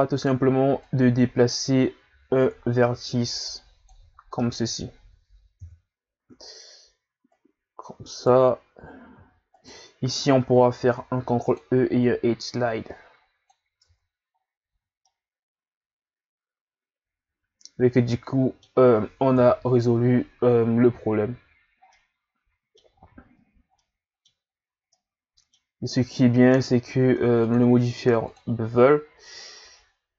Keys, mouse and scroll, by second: 0.2 right click, 0.9 click, 4.1 scroll down 3, 4.4-5.6 middle drag, 5.6 KP_1, 6.4 scroll up 1, 7.4 right click, 9.6 alt+right click, 10.8 ctrl+e, 13.8 Tab, 14.4 scroll down 3, 14.7 a, 15.0-18.1 middle drag, 19.3 KP_1, 21.6 scroll down 3, 21.9-22.9 middle drag, 22.9 scroll up 2, 23.5 ctrl+scroll down 1, 23.8-24.5 middle drag, 24.5-24.9 scroll up 1, 24.9-27.4 middle drag, 27.4-30.1 drag.